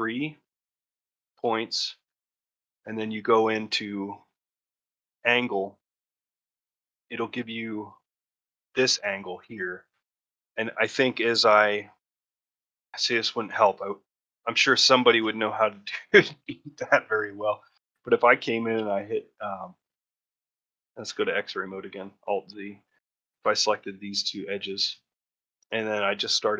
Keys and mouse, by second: 0.0 shift+click, 4.9-12.5 drag, 12.7 shift+middle click, 13.1 ctrl+middle click, 14.5 middle click, 14.9 middle click, 15.2 middle click, 18.6 2, 22.7 click, 23.4-24.7 middle drag.